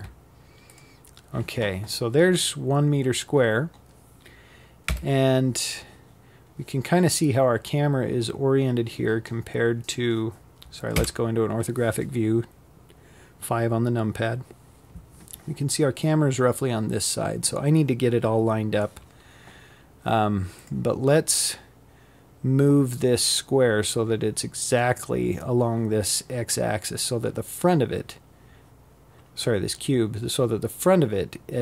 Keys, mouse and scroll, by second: 0.7-1.1 scroll up 3, 1.1-2.5 scroll down 2, 2.5 KP_7, 3.7 scroll down 4, 7.4-8.6 scroll up 3, 8.6 KP_5, 18.2 click, 21.4-21.8 scroll up 6, 24.7 scroll down 2.